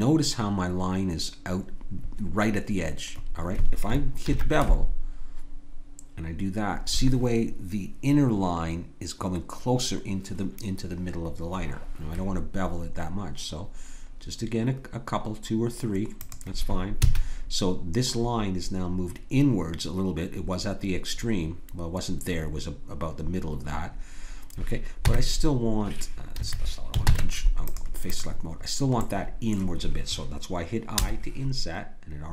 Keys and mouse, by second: 4.3 ctrl+b, 17.0 a, 25.0 Tab, 27.0 ctrl+Tab, 28.0-30.2 drag, 30.3 click, 30.9 i.